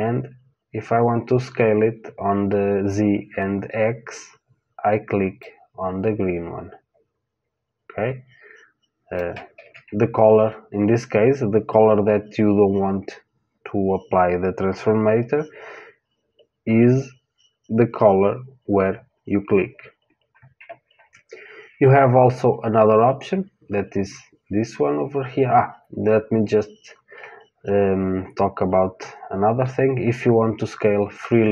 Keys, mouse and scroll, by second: 5.3 click, 9.5 ctrl+z, 31.2 click.